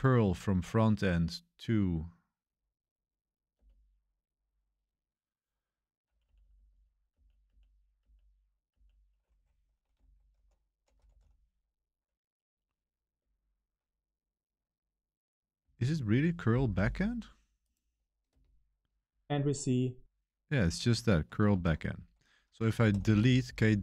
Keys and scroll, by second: 3.5 Return, 6.2 Up, 6.3 Up, 6.5 Up, 6.6 Up, 7.0 Up, 7.4 Up, 7.9 Up, 8.7 Up, 9.3 ctrl+v, 9.3 ctrl+c, 9.9 ctrl+c, 10.3 ctrl+r, 10.6-11.6 typing, 13.1 Return, 15.6 ctrl+c, 16.0 super+1, 16.3 ctrl+c, 16.3 super+1, 18.7 space, 21.5 super+3, 22.5-23.8 typing.